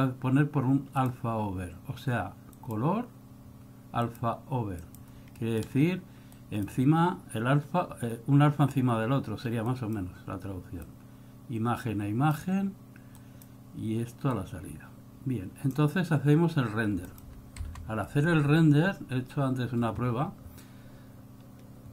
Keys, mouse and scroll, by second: 1.1 click, 5.4-6.1 scroll up 4, 5.5 middle click, 6.5 click, 9.8 click, 10.9 click, 13.3 click, 14.4 click, 17.1 click.